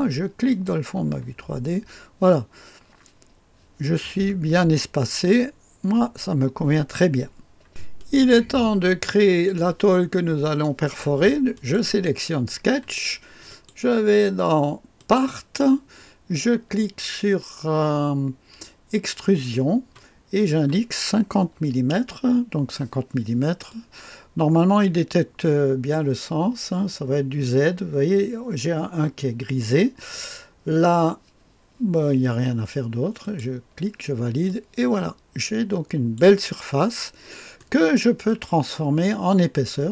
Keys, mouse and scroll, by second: 0.5 click, 0.9-1.8 typing, 1.3-3.9 scroll up 1, 4.2-6.1 scroll up 2, 6.1-7.7 scroll down 2, 7.7-10.0 drag, 11.5 click, 13.5 click, 15.0-16.0 drag, 19.2 click, 21.5 KP_5, 21.9 KP_0, 23.7 click, 24.7 middle click, 24.7 typing, 25.9 click, 33.4 click, 34.7-36.2 drag, 36.6 click, 37.1-38.0 scroll up 2, 37.6-39.9 right drag.